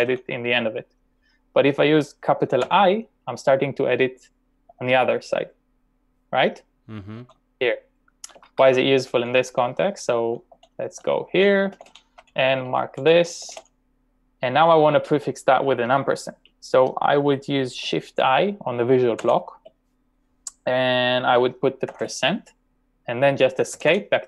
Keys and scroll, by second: 0.0-1.1 typing, 2.7 l, 7.0-8.8 typing, 10.3-14.1 typing, 12.9 ctrl+v, 19.3 typing, 22.0 shift+5, 23.8 typing.